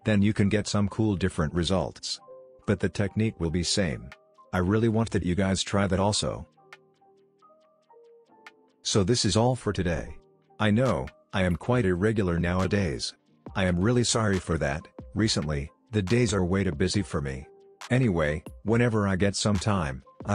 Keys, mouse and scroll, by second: 2.9-3.5 click, 4.2 space, 5.0-5.6 click, 6.0 n, 6.5-7.1 click, 6.9 space, 14.8 space, 16.0 click, 18.7 scroll down 1, 19.4 click, 19.5 click.